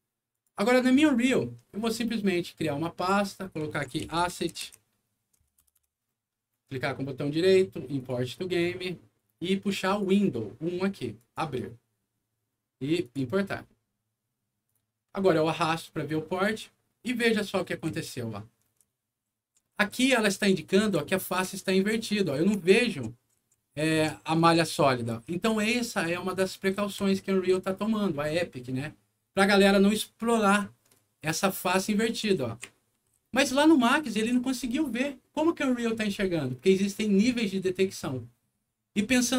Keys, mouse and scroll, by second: 0.3 click, 0.7 typing, 1.7 right click, 2.9 click, 3.5-5.1 typing, 5.6 Return, 6.6 right click, 7.9 click, 9.8 click, 11.1 click, 13.0 click, 14.6 click, 15.4-16.4 drag, 17.2-27.7 right drag, 17.6 w, 18.8 d, 22.3 d, 23.9-26.4 typing, 30.1-34.2 right drag, 30.6 w, 33.1 s, 34.4 s, 39.1 click.